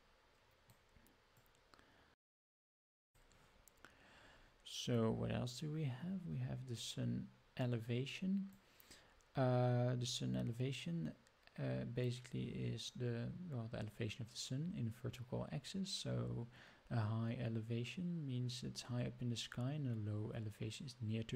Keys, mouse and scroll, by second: 0.6 click, 1.4-2.9 drag, 7.6-8.6 drag, 12.8-16.4 drag, 16.4-21.3 drag.